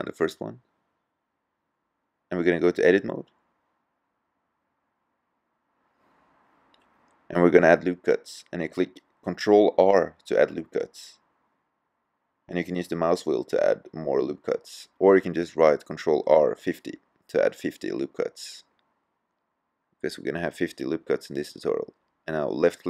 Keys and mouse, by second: 0.7 middle click, 2.8-4.6 drag, 9.7 ctrl+r.